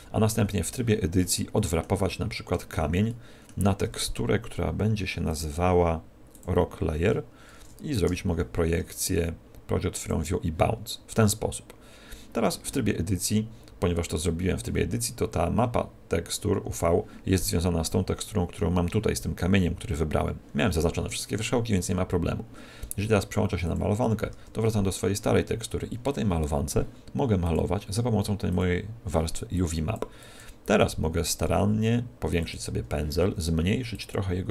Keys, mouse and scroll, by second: 0.2 middle click, 2.0 middle click, 5.2 click, 6.3 click, 23.6 click, 24.2 Tab, 27.4 click, 29.5 click, 30.8 click, 31.4 f, 32.4 click, 33.8 click.